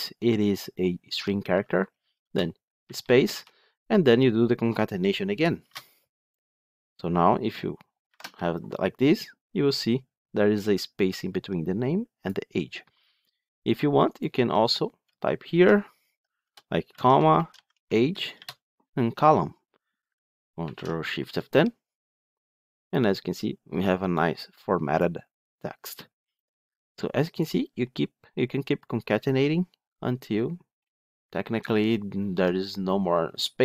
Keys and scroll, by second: 8.0 ctrl+shift+F10, 20.5 ctrl+shift+F10.